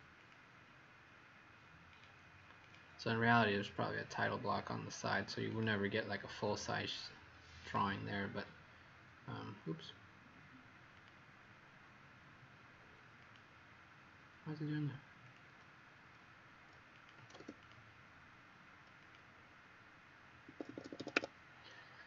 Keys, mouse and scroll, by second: 17.1 s, 17.6 click, 19.0 click, 20.4 Escape, 20.6 Escape, 20.7 Escape, 20.9 Escape, 21.1 Escape.